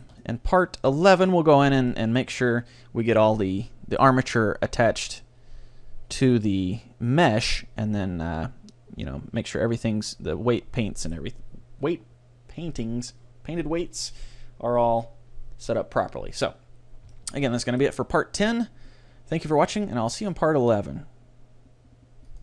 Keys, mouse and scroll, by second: 7.8-9.1 scroll up 1, 9.1-9.6 scroll down 1, 9.6-11.5 middle drag, 17.2-19.3 middle drag.